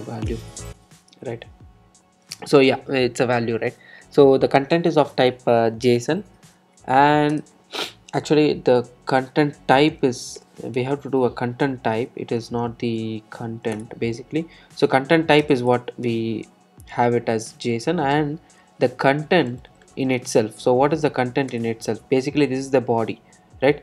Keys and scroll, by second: 9.9 Return, 21.0 Return.